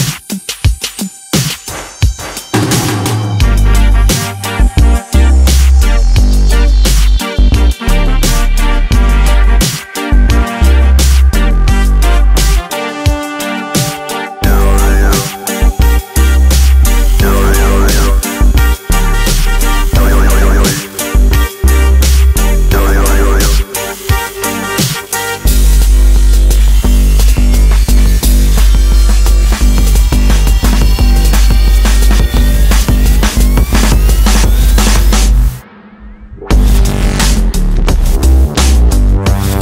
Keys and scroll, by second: 9.7 Return, 19.3 Return, 25.7 space, 28.0 Escape.